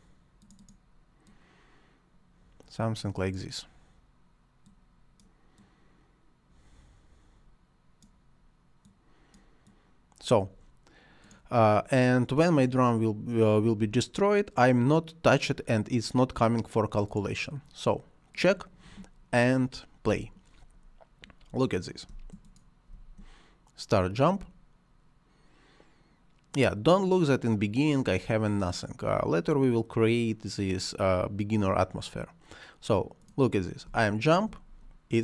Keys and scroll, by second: 22.0 space, 33.8 space.